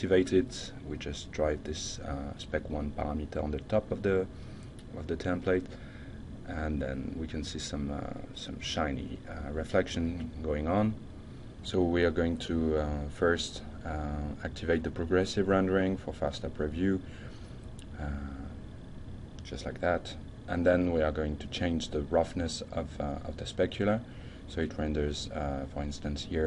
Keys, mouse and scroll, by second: 0.6 click, 1.4 F5, 3.4 shift+middle click, 15.9 click, 17.0-18.0 shift+middle drag, 21.5 click, 22.3-23.9 drag, 24.3 click, 25.7-26.3 shift+middle drag.